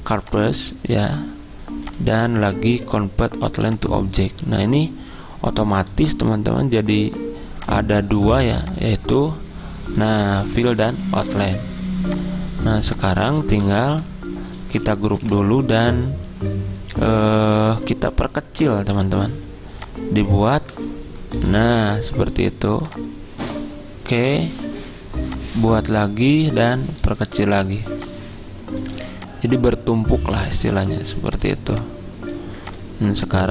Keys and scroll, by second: 10.3 ctrl+z, 13.5 ctrl+z, 15.2 ctrl+g.